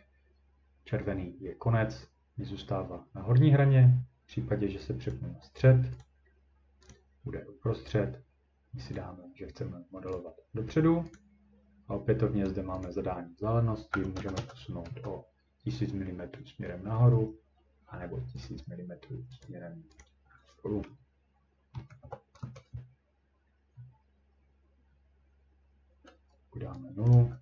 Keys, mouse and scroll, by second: 5.1 click, 6.0 click, 6.9 click, 8.9 click, 10.1 click, 11.2 click, 12.8 click, 13.7-14.7 typing, 14.9 Return, 15.8 scroll down 1, 16.4 scroll up 1, 18.4 click, 19.4 click, 20.0 click, 20.9 scroll, 21.7-22.4 typing, 23.8-25.0 scroll, 27.1 click, 27.2 typing.